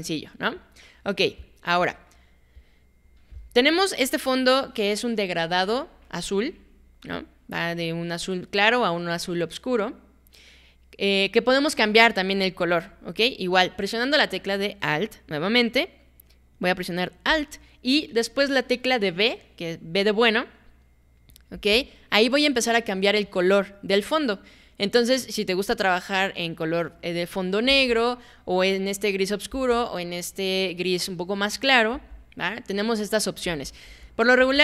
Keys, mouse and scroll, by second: 0.0-0.6 alt+drag, 0.8 alt+right click, 1.1 alt+middle click, 1.4-1.8 alt+drag, 2.1 alt+right drag, 2.6-3.0 alt+drag, 21.5 alt+b, 27.7 alt+b, 29.5 alt+b, 31.9 alt+b, 33.5 alt+b, 33.9 alt+b, 34.4 alt+b.